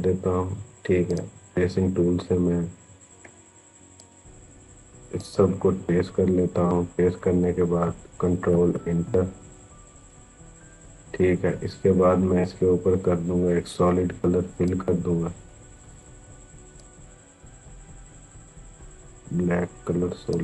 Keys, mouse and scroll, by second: 8.3 ctrl+Return, 11.9-12.3 scroll down 1, 14.4-20.4 drag.